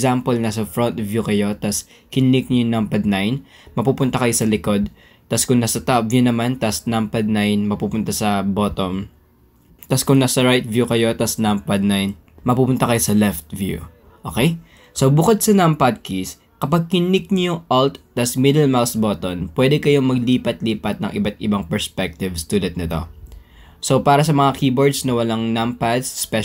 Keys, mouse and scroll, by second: 1.0 KP_1, 3.5 KP_9, 6.3 KP_7, 7.4 KP_9, 10.4 KP_3, 12.2 KP_9, 14.3-14.8 drag, 15.0 click, 15.6 shift+drag, 16.9 click, 17.6 shift+drag, 18.7 click, 20.5-20.9 alt+drag, 21.2-21.5 alt+drag, 21.7-22.1 alt+drag, 22.2 alt+click, 22.6 alt+drag, 23.0-23.4 alt+drag, 23.5-23.8 alt+drag, 24.0-24.4 alt+drag, 24.6-24.9 alt+drag, 25.2 alt+drag, 25.4 alt+middle click, 25.7 alt+drag.